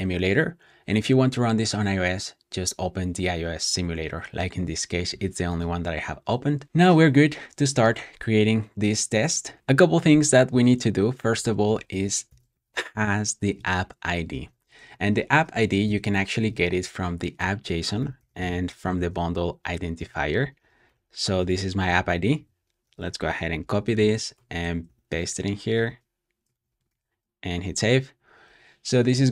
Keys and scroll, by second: 6.6 typing, 12.7 d, 14.2-15.8 typing, 14.9 super+p, 16.6 super+f, 17.6-22.7 typing, 23.5 super+c, 23.9 shift+super+[, 24.2 Escape, 24.7-25.7 typing, 26.5 super+v, 26.8 super+s.